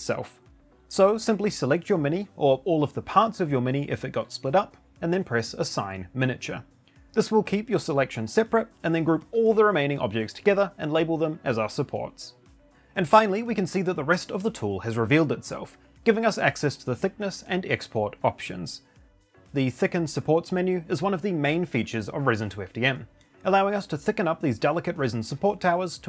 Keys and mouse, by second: 0.0 shift+click, 0.4 shift+click, 0.7 shift+click, 1.3 shift+click, 1.9 shift+click, 2.9 shift+click, 3.5 shift+click, 3.8-4.4 shift+drag, 4.5 click, 4.8 middle click, 6.9 click, 14.9 click, 18.0 click, 25.4 click.